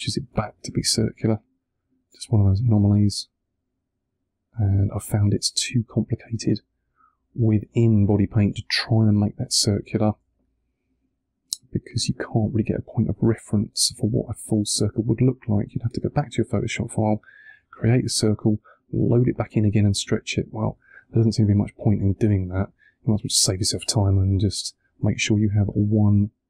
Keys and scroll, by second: 23.8 1.